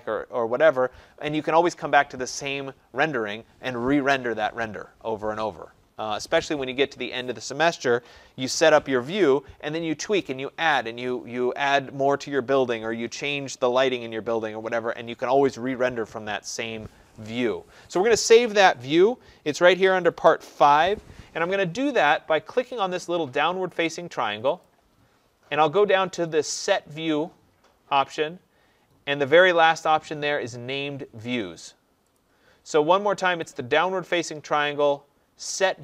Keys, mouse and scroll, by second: 24.6 click, 32.1 click, 33.5 click.